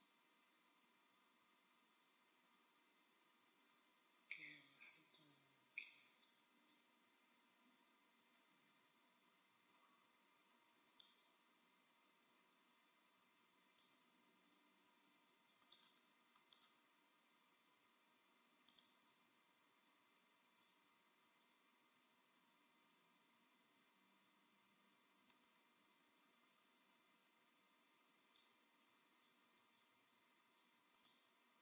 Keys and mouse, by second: 3.6 KP_1, 6.3 e, 10.9-12.5 drag, 11.4 e, 13.8 right click, 13.9 z, 18.7-20.3 drag, 19.3 e, 25.3 middle click, 25.3-26.4 drag, 26.4 z, 26.5-28.4 middle drag, 30.2 ctrl+r.